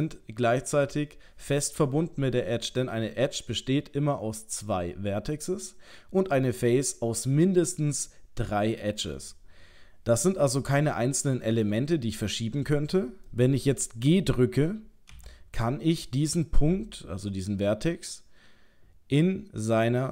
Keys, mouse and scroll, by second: 10.9 middle click, 11.9 shift+middle click, 13.3 middle click, 15.1 g.